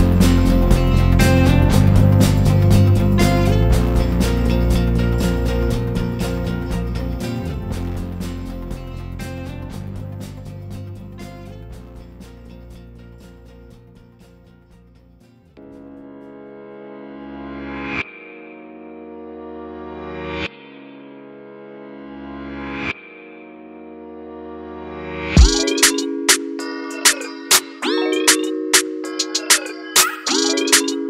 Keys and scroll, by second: 2.5 Return, 4.3 ctrl+=, 6.0 ctrl+=, 19.9 ctrl+-, 29.9 ctrl+=.